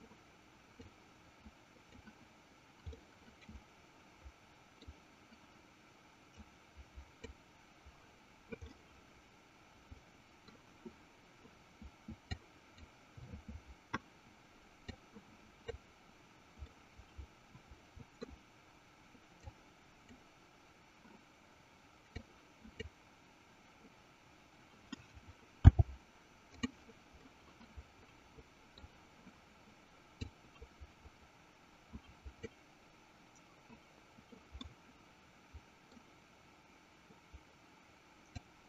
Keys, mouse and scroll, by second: 1.4-2.5 drag, 3.3-5.0 middle drag, 6.8 click, 9.1-10.7 middle drag, 12.7 click, 15.3-16.4 drag, 16.9-18.6 middle drag, 20.1 click, 22.6 click, 25.5 f, 27.4-29.0 middle drag, 30.8-33.4 drag, 34.9-36.0 middle drag.